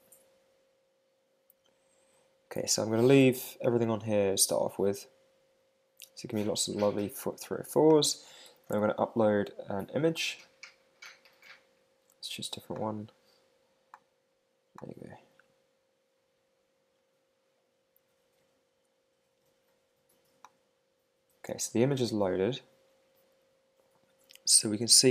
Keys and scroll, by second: 8.6 Return, 8.9 super+Tab.